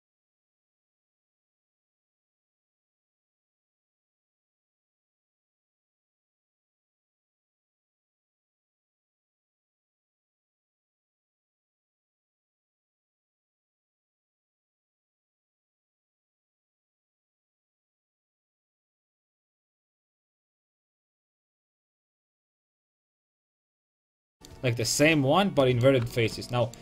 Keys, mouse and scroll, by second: 5.3-6.9 right drag, 6.9-10.3 middle drag, 10.5-12.8 middle drag, 13.7 g, 14.5 Tab, 15.4 a, 15.7 a, 16.7 l, 17.2 g, 19.3 g, 22.6 g.